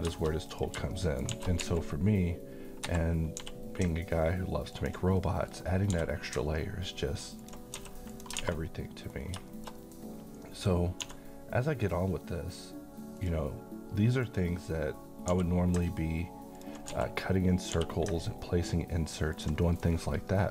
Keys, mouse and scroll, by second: 0.9 shift+middle click, 1.3 shift+d, 1.6 z, 2.8 Escape, 3.4 g, 4.7 ctrl+click, 5.2 middle click, 5.9 g, 7.4 click, 7.7 s, 8.1 click, 8.4 alt+a, 8.6-9.3 middle click, 9.2 scroll down 1, 9.5 middle click, 10.0-10.4 scroll up 1, 10.4 middle click, 11.0 d, 11.8 click, 15.3 g, 16.5 ctrl+click, 16.9 s, 17.6 click, 17.7 g, 19.4 ctrl+click, 19.6 middle click, 20.0-20.4 scroll up 1, 20.4 middle click.